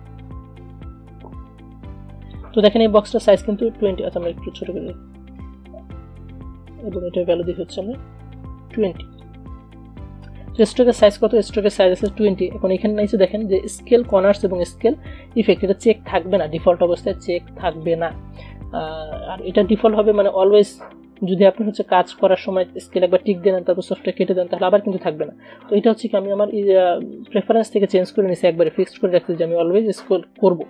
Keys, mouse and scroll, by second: 6.0-6.3 alt+scroll up 1, 7.0 click, 7.4 ctrl+a, 9.3 click, 9.9 alt+scroll down 1, 10.5-17.0 drag, 27.3 click.